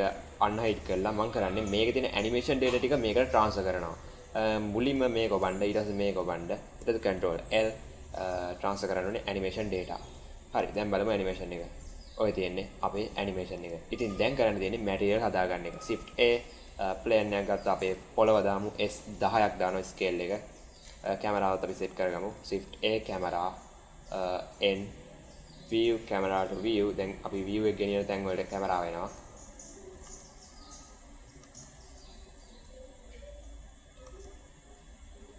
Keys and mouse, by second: 1.1-1.4 middle drag, 4.8 click, 5.6 shift+click, 7.1 ctrl+l, 10.0 click, 10.5 space, 13.8 space, 14.0 shift+middle click, 15.9 shift+a, 18.5 s, 20.6 middle click, 20.8 shift+a, 23.0 KP_0, 24.3 n, 25.6 drag, 26.3 click, 26.6 n, 29.2-29.8 shift+middle drag, 29.9 space, 31.3 space, 31.7-32.5 shift+middle drag, 32.7 middle click, 33.4 middle click, 33.9 space.